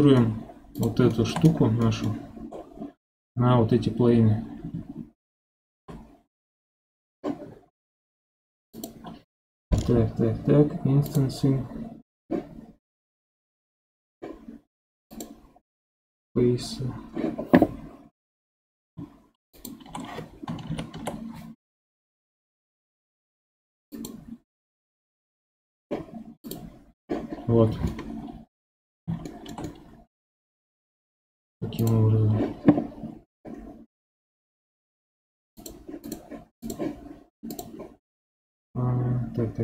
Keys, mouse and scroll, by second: 0.7 click, 1.1 shift+middle drag, 1.4-1.8 scroll up 3, 1.8 middle click, 2.5-5.6 scroll down 1, 8.7 click, 11.0-14.0 drag, 15.1 click, 19.5 shift+click, 20.7 ctrl+p, 26.4 click, 27.9 middle click, 28.7-29.3 scroll up 2, 29.3-31.8 shift+middle drag, 31.8 click, 35.5 click, 36.0 click, 36.6 click, 37.5 click, 38.1-38.4 scroll down 5.